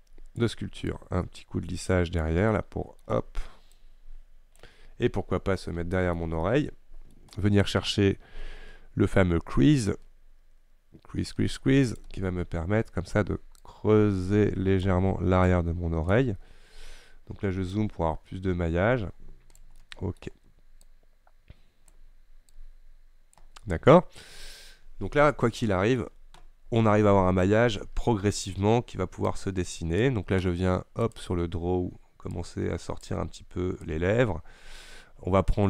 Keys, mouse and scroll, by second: 1.0-2.6 shift+drag, 2.6 middle click, 3.1-3.8 scroll up 1, 3.8-4.8 shift+drag, 4.8-5.8 scroll down 2, 5.8-7.2 shift+middle drag, 7.2-9.2 scroll up 1, 9.2-12.0 scroll up 1, 12.0-16.5 drag, 16.5-17.7 scroll up 2, 17.7 scroll up 1, 17.8-19.9 drag, 19.9-20.9 middle drag, 20.9-23.7 drag, 23.7 middle click, 24.3 scroll up 1, 24.4-25.2 scroll down 2, 25.4-29.3 middle drag, 29.3-35.6 drag.